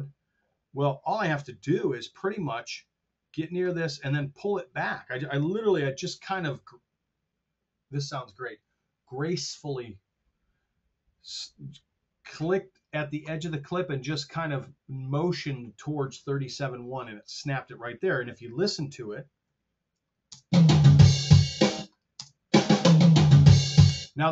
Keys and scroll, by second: 5.8 super+z, 19.5 F7, 20.3 space, 21.6 space, 23.9 space.